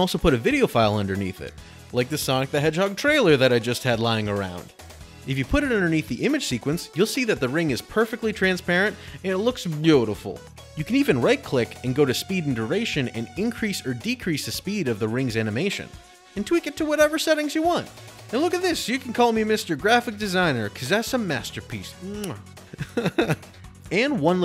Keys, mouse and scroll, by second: 0.6 click, 4.3 click, 4.8 click, 4.8 right click, 5.8 right click, 10.8 click, 11.5 right click, 13.7 click, 14.9-15.2 typing, 15.7 Return, 16.6 click, 16.6 right click, 16.7 right click, 16.7 Return, 16.9 click, 17.4 click, 17.6 click, 17.6 s, 17.6 click, 17.7 click, 17.8 t, 18.1 t, 23.7 click.